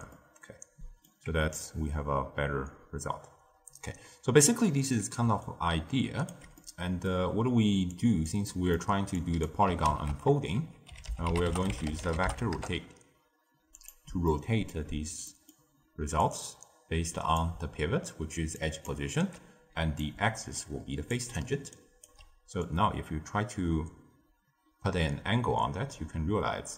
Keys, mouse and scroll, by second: 0.1-1.5 middle drag, 1.5-4.5 drag, 5.2 d, 5.4 right click, 6.2 d, 6.5-7.9 middle drag, 7.9 click, 8.4-9.1 middle drag, 9.1 click, 9.8 ctrl+a, 14.2 middle click, 14.9-15.2 scroll down 1, 15.2-16.2 middle drag, 16.2 click, 17.5-18.2 d, 18.5 click, 18.8-19.3 d, 19.9 drag, 21.4 d, 21.7 right click, 22.0 d, 22.5-25.6 drag.